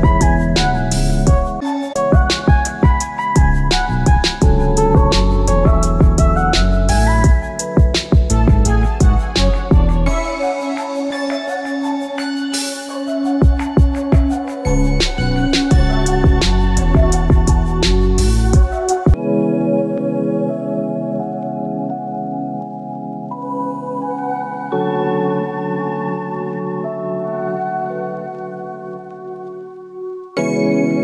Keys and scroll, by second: 18.7 ctrl+alt+shift+e.